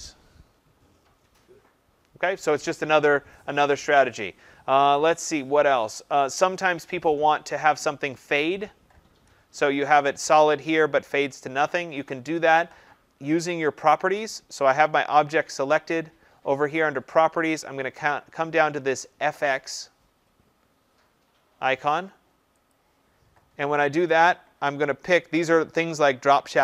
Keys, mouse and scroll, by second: 22.6 click.